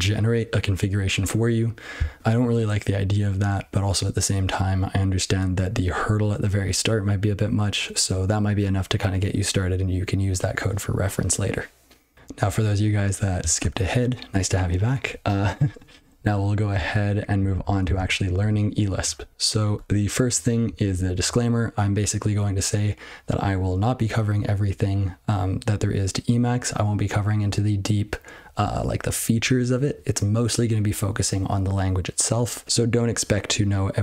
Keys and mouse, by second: 16.7-17.3 ctrl+f, 17.5 ctrl+a, 17.8 ctrl+space, 17.9 ctrl+n, 18.3 ctrl+g, 19.7 Tab, 20.6 ctrl+n, 20.8 ctrl+n, 21.1 ctrl+n.